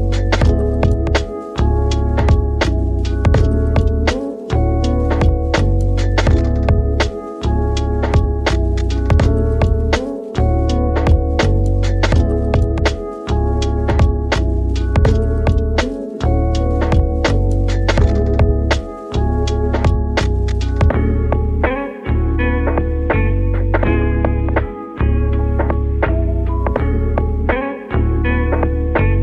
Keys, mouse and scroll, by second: 2.1 s, 3.5 KP_1, 5.4 g, 7.5-9.4 middle drag, 9.4 KP_7, 11.0 g, 13.3 g, 14.4 r, 15.0 click, 15.4-17.7 middle drag, 17.7 click, 18.6 g, 20.5 r, 22.9 click, 23.1-26.2 middle drag, 27.3 click, 29.1 middle click.